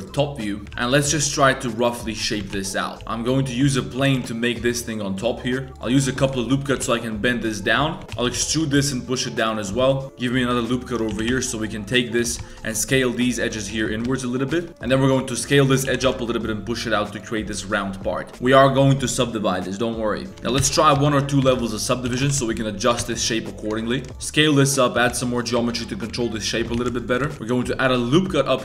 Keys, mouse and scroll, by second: 0.7 shift+a, 2.4 Tab, 2.5 s, 2.9 1, 4.0 s, 4.0 g, 5.7 ctrl+r, 6.0 1, 6.1 click, 6.5 shift+click, 6.7 g, 7.8 Tab, 8.0 2, 8.0 s, 8.1 e, 8.3 g, 9.6 2, 9.8 click, 10.0 ctrl+r, 10.4 3, 10.5 click, 10.8 ctrl+click, 11.1 g, 12.2 2, 12.7 s, 13.7 1, 14.0 click, 14.5 ctrl+click, 14.8 ctrl+z, 14.8 click, 14.8 s, 14.8 g, 15.2 s, 15.9 g, 17.5 1, 17.9 Tab, 20.3 Tab, 20.3 z, 20.3 g, 20.5 Tab, 20.6 ctrl+1, 21.0 ctrl+2, 21.4 Tab, 21.5 2, 21.6 click, 22.1 g, 23.0 Tab, 23.6 Tab, 23.8 1, 23.9 click, 24.1 ctrl+r, 24.9 s, 25.6 Tab, 26.7 Tab, 26.7 s, 27.3 shift+click, 27.3 ctrl+r.